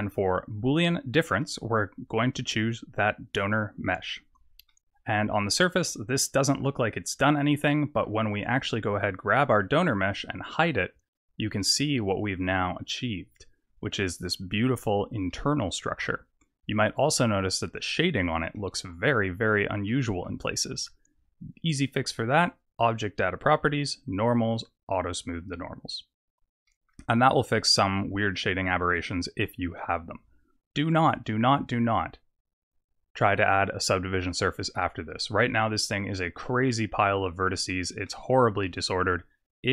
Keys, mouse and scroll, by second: 1.4 click, 4.7 middle click, 5.6 click, 5.8 middle click, 7.6 middle click, 8.6 click, 10.3 click, 11.0 click, 11.6 middle click, 14.6-14.9 scroll up 4, 15.3 middle click, 18.0 scroll down 4, 18.5 middle click, 19.8 middle click, 20.4-21.3 scroll up 3, 22.8 click, 24.0 click, 25.1 click, 26.2-26.6 scroll down 4, 26.6 middle click, 27.2 click, 27.5 middle click, 31.1 click, 32.8 click, 36.4 middle click, 36.9 Tab, 37.6 Tab, 38.0 middle click, 38.6-39.4 scroll up 3.